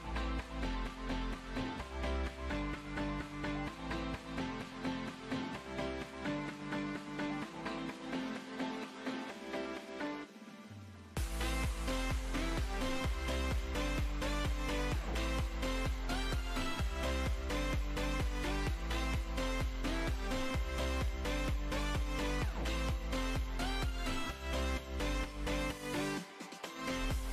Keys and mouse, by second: 0.1 z, 0.9 middle click, 2.1 middle click, 2.3 b, 3.2 b, 6.0 click, 6.0 e, 6.7 Tab, 7.0 z, 8.0 KP_1, 8.2 b, 8.5 b, 9.6 Tab, 10.3 Tab, 12.9 ctrl+z, 13.1 ctrl+r, 16.3 Tab, 16.4 Tab, 17.9 Tab, 18.8 Tab, 19.7 KP_1, 23.6 KP_1, 24.6 middle click, 24.6-26.6 typing.